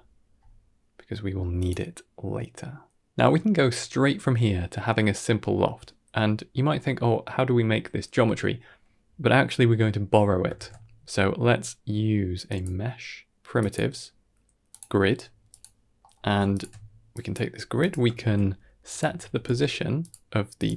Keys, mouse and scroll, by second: 3.5 click, 5.2 middle click, 10.4 shift+a, 15.9 middle click, 16.4 alt+shift+click, 17.0 drag, 17.4 g, 18.0 shift+a.